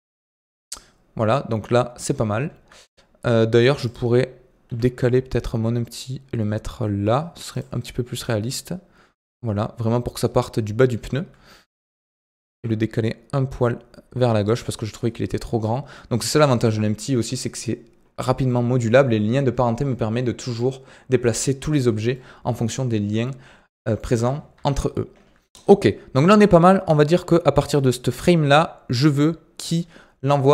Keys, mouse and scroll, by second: 2.1 scroll up 4, 3.1 scroll up 2, 3.8 click, 4.6 g, 8.2-11.3 drag, 12.4 g, 15.6-18.4 drag, 18.4-19.5 middle drag, 19.5 scroll down 2, 22.1-24.1 middle drag, 24.1 KP_1, 24.5 KP_3, 26.1-29.1 drag.